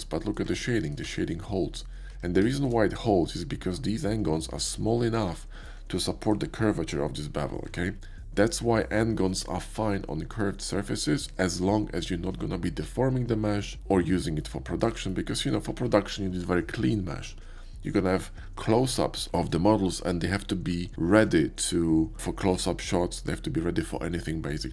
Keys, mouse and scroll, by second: 0.3 middle click, 0.9 middle click, 1.1 Tab, 2.2 shift+middle click, 2.8 middle click, 3.3 right click, 3.8-5.6 middle drag, 7.4-15.2 middle drag, 7.7 Tab, 15.6-17.9 shift+middle drag.